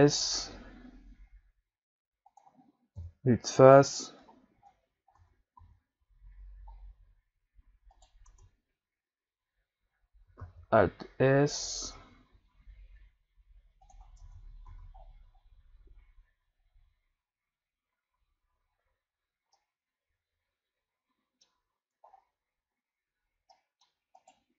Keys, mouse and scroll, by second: 3.0 KP_1, 3.9-5.2 scroll down 2, 5.2 Tab, 5.6 a, 6.8-7.1 scroll up 4, 7.9 right click, 8.3 Tab, 10.4 alt+s, 12.4 middle click, 13.4 middle click, 14.2 Tab, 14.2 middle click, 14.7 a, 15.0-16.3 scroll down 5, 19.1-19.6 scroll up 2, 19.6-21.8 middle drag, 21.8-22.1 scroll down 2, 22.1-23.5 scroll up 4, 23.5 middle click, 24.2 right click.